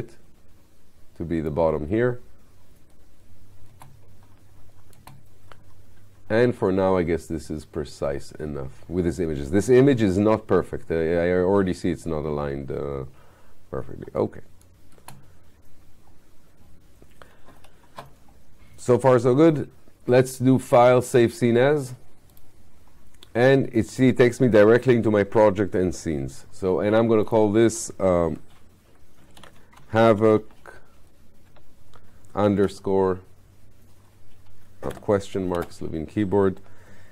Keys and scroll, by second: 3.8 space, 14.0 space.